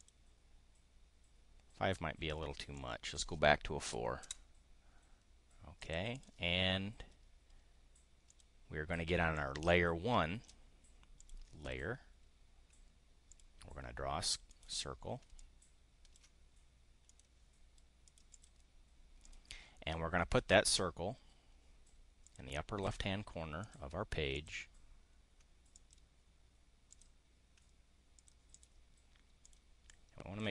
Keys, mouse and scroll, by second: 2.8 click, 3.8 4, 4.3 Return, 5.8 click, 8.3 click, 9.4-10.6 drag, 11.2 click, 13.2 click, 14.5 click, 15.3 ctrl+click, 17.1 click, 18.0 click, 19.2 click, 22.2 click, 23.6 click, 24.3 click, 25.7 click, 26.9 click, 28.2 click, 28.4 click, 29.4 click, 29.7 click.